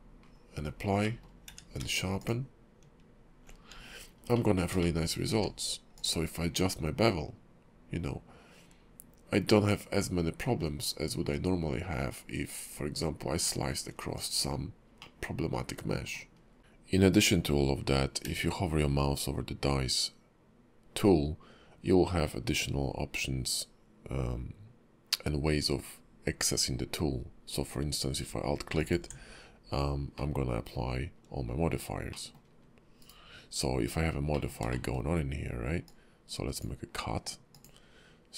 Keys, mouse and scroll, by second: 0.2-1.0 scroll down 5, 1.0 middle click, 1.5 q, 4.0 scroll up 1, 4.3 middle click, 4.8 shift+middle click, 5.3 q, 15.0 middle click, 16.4 scroll up 2, 18.2 q, 30.2 middle click, 32.1 middle click, 34.3 middle click, 34.7 shift+middle click, 35.8 click.